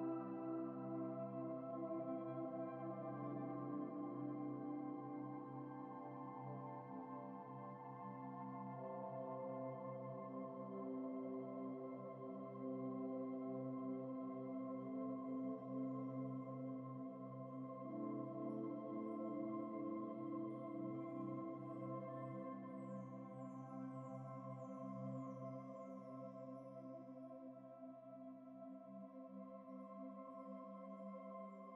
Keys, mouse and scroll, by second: 0.7 ctrl+v, 1.2 typing, 2.9 ctrl+t, 3.4 shift+click, 5.4 Down, 5.5 Down, 6.0 Up, 6.1 Up, 6.6 ctrl+space, 6.7 ctrl+click, 6.8 ctrl+space, 7.5 ctrl+-, 8.1 typing, 10.0 Return, 10.6 typing, 11.8 ctrl+t, 16.0 Return, 16.6 ctrl+-, 17.1-17.4 typing, 19.5 alt+Tab, 22.0 alt+Tab, 22.4 alt+Tab, 22.5 alt+Tab, 24.0 alt+Tab, 26.3 ctrl++, 26.9 typing, 30.7 ctrl+v, 31.4 ctrl+t.